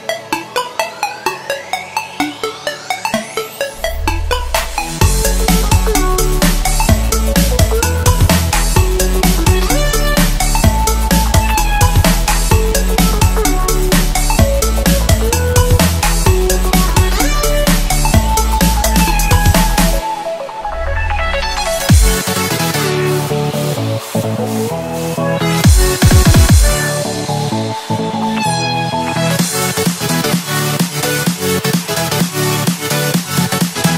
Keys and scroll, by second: 1.7 space, 2.2 super+space, 2.5 super+space, 3.6 space, 4.1 alt+super+space, 4.1 alt+super+space, 4.2 alt+super+space, 4.3 alt+super+space, 4.5 alt+super+space, 4.6 alt+super+space, 4.8 alt+super+space, 4.9 alt+super+space, 5.3-7.2 alt+super+space, 6.3-7.3 typing, 8.4 Left, 8.7 Left, 8.9 Left, 9.0 Left, 10.3 space, 10.8 super+space, 10.8 super+space, 10.9 super+space, 11.0 super+space, 11.1 super+space, 11.2 super+space, 12.1 super+space, 12.6 space, 13.1 alt+super+space, 13.2 alt+super+space, 13.3 alt+super+space, 13.4 alt+super+space, 13.6 alt+super+space, 13.6 alt+super+space, 13.7 alt+super+space, 13.8 alt+super+space, 14.6-20.1 typing, 18.4 Left, 20.6 super+space, 20.9 super+space, 20.9 super+space, 22.4-24.6 typing, 24.1 alt+super+space, 24.3 alt+super+space, 24.4 alt+super+space, 24.5 alt+super+space, 24.5 alt+super+space, 24.6 alt+super+space, 24.7 alt+super+space, 24.8 alt+super+space, 24.9 alt+super+space, 26.2 alt+super+space, 26.7 alt+super+space, 27.0 alt+super+space, 27.9 super+space, 28.4 super+space, 29.2 super+space, 29.9-30.4 alt+super+space.